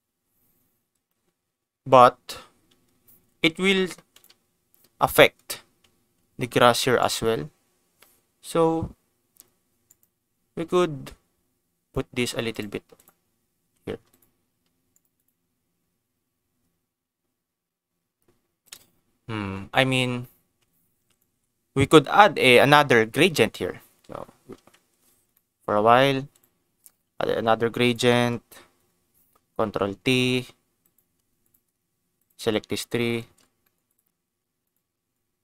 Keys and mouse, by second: 4.1 click, 6.1 g, 6.9 click, 7.2 g, 9.8 click, 11.9 g, 12.5 click, 13.6 ctrl+s, 14.1 click, 14.4 g, 14.9 right click, 15.1 click, 15.6 g, 18.6 click, 21.1 ctrl+shift+click, 25.3 middle click, 26.3 click, 27.1 shift+d, 27.8 click, 28.1 middle click, 29.8 ctrl+t, 30.8 click, 31.4 shift+click, 32.1 shift+click, 32.5 click, 33.6 middle click, 33.9 click, 34.6 click.